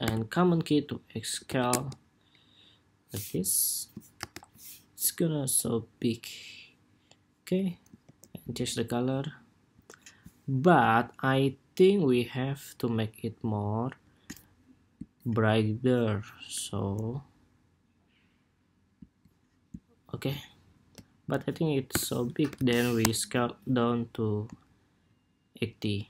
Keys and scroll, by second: 4.0 super+-, 7.7 ctrl+c, 16.4 ctrl+c, 21.6 super+k.